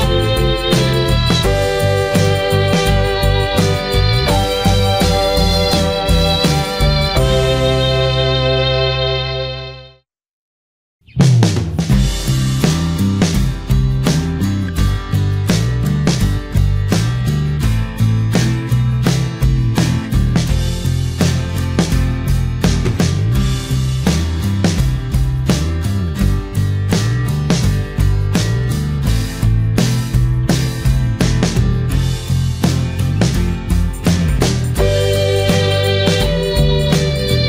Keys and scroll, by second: 37.3 ctrl+t.